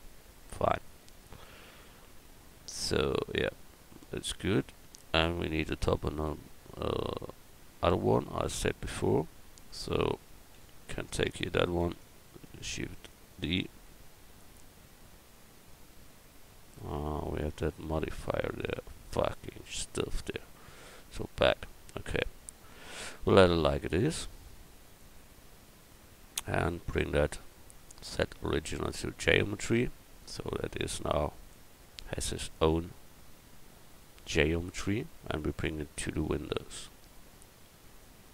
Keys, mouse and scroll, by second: 6.3 Tab, 9.4 a, 10.5 l, 11.8 shift+d, 20.6 ctrl+z, 21.6 a, 22.1 Tab, 24.8 click, 26.0-27.2 right drag, 27.2 middle click, 28.0-30.0 right drag, 30.2-32.1 right drag, 33.1-34.3 right drag, 34.6 right click, 34.7 middle click, 35.9-38.3 drag.